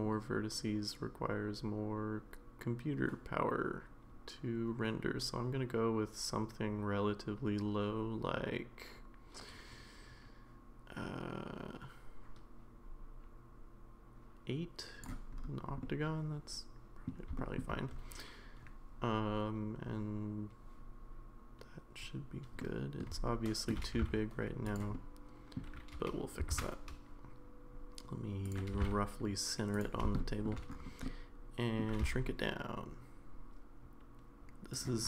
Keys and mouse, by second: 15.8-17.0 middle drag, 17.4 shift+middle click, 22.6-23.0 middle drag, 23.2-23.7 shift+middle drag, 23.9 g, 24.9-25.6 middle drag, 25.9 g, 30.0 shift+g, 30.2 middle click, 30.4 shift+g, 31.0 middle click.